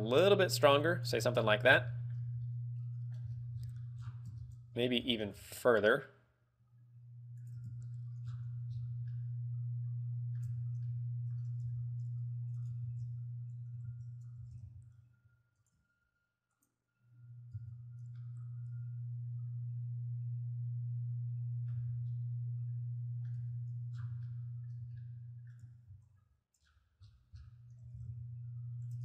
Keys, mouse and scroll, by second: 1.2 click, 1.4 Tab, 1.5-2.1 scroll down 7, 2.2 middle click, 2.4 z, 2.5 middle click, 3.4-3.8 scroll up 10, 4.3 scroll down 3, 4.6 Tab, 4.7-5.5 scroll up 3, 5.6 g, 7.7 shift+click, 7.9 Tab, 8.4-8.8 scroll down 4, 8.9 scroll up 3, 9.3 middle click, 10.8 Tab, 11.1 middle click, 12.1 y, 13.0 right click, 13.3 ctrl+z, 14.2 ctrl+z, 14.5 g, 15.9 shift+click, 16.7 click, 17.8 Tab, 18.3 middle click, 22.0 z, 22.2 middle click, 23.7 Tab, 24.1 scroll down 2, 24.6 middle click, 24.9 z, 25.2 middle click, 26.3 alt+h, 26.8-27.1 scroll down 3, 27.3 scroll up 6, 28.0 g.